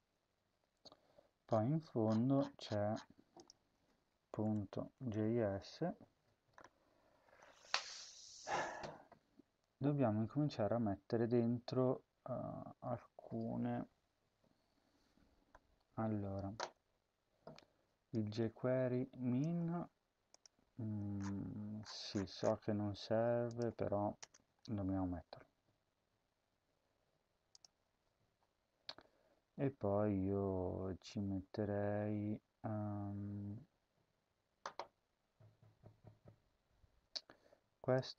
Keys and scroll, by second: 3.7 ctrl+f, 4.1-5.6 typing, 19.6 ctrl+c, 24.1 Return, 24.4 ctrl+v.